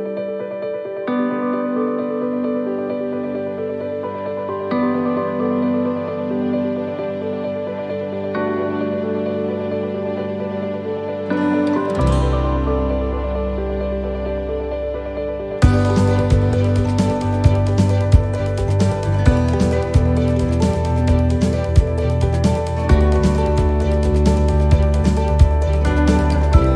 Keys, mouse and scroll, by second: 0.3 middle click, 7.0 s, 8.8 middle click, 9.5-10.0 scroll down 3, 10.0 middle click, 10.3-10.9 scroll up 5, 11.1 middle click, 11.7 right click, 12.2 shift+right click, 12.6 middle click, 13.7 shift+right click, 16.6 click, 18.1 middle click, 18.7-19.3 scroll down 3, 19.3 middle click, 19.7 scroll down 1, 20.0 middle click, 20.4-20.7 scroll down 1, 20.7 middle click, 21.3-21.6 scroll up 2, 22.0 shift+middle click, 22.3-22.7 scroll up 3, 22.7 middle click, 23.4 shift+middle click, 23.7 scroll up 2, 24.0 middle click, 25.0 right click, 25.6 shift+right click, 26.1 right click, 26.4 right click.